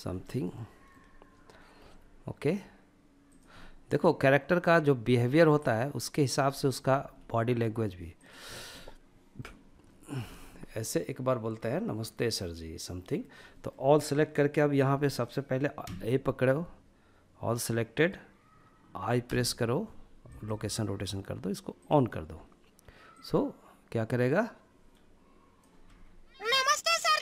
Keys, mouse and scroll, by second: 0.7 g, 2.2 click, 2.6-5.4 middle drag, 5.5 click, 6.0 g, 7.2 drag, 7.4 scroll down 1, 7.7-8.6 middle drag, 8.8-9.2 shift+middle drag, 9.2 scroll down 1, 9.5-10.5 middle drag, 10.7-12.4 middle drag, 12.5-14.9 middle drag, 14.9 a, 20.8-24.8 drag, 24.8 space, 27.0 space.